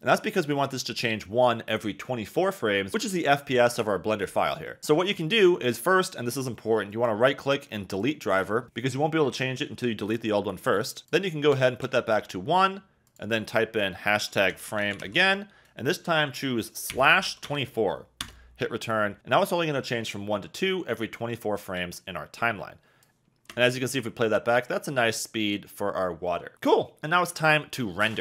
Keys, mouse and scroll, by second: 6.9-8.1 drag, 11.0 click, 13.0-18.3 drag, 21.8 click, 23.5 space.